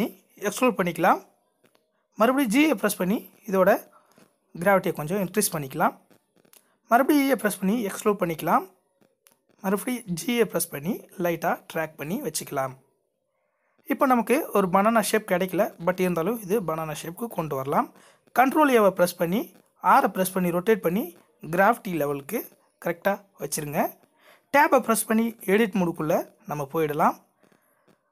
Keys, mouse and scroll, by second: 2.2 g, 4.9 e, 8.4 scroll down 2, 9.0 g, 13.2 Tab, 13.7 a, 15.8 r, 18.8 g, 21.6 Tab, 27.7 ctrl+2.